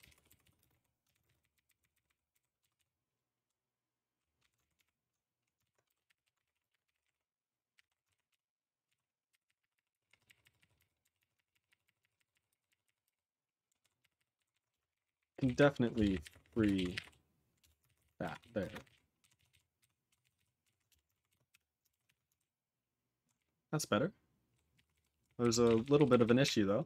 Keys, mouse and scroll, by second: 0.1 ctrl+p, 0.4 ctrl+s, 0.6 ctrl+space, 0.6 ctrl+g, 1.0 ctrl+a, 1.1 ctrl+n, 1.2 ctrl+space, 1.2 ctrl+e, 1.2 ctrl+n, 1.3 ctrl+n, 1.5 ctrl+n, 1.6 ctrl+n, 1.8 ctrl+n, 1.9 ctrl+n, 2.0 ctrl+n, 2.3 ctrl+g, 2.7 ctrl+s, 3.4-4.1 ctrl+p, 4.4 ctrl+n, 4.5 alt+f, 4.7 alt+f, 5.6-8.3 typing, 8.9 ctrl+s, 9.3 ctrl+r, 9.4 ctrl+r, 9.5 ctrl+r, 9.7 ctrl+r, 9.9 ctrl+r, 10.1 ctrl+r, 10.2 ctrl+r, 10.4 ctrl+r, 10.5 ctrl+r, 10.7 ctrl+r, 11.0 ctrl+r, 11.2 ctrl+r, 11.3 ctrl+r, 11.5 ctrl+r, 11.6 ctrl+r, 11.8 ctrl+r, 12.0 ctrl+r, 12.2 ctrl+r, 12.3 ctrl+r, 12.4 ctrl+r, 12.6 ctrl+r, 12.8 ctrl+r, 13.0 ctrl+r, 13.6 ctrl+s, 13.8 ctrl+s, 14.0 ctrl+r, 14.1 ctrl+r, 14.4 ctrl+s, 14.5 ctrl+s, 14.7 Return, 14.9 ctrl+n, 15.0 ctrl+n, 15.1 ctrl+n, 15.3 ctrl+n, 15.4 ctrl+n, 15.5 ctrl+n, 15.8-17.9 typing, 17.6 Return, 17.8 ctrl+e, 18.4 ctrl+s, 18.6 ctrl+space, 18.6 ctrl+a, 18.8 ctrl+g, 18.8 ctrl+e, 19.2 ctrl+s, 19.5 ctrl+s, 19.8 ctrl+s, 20.0 ctrl+s, 20.2 ctrl+s, 20.3 ctrl+s, 20.6 ctrl+s, 20.8 Return, 21.2 ctrl+s.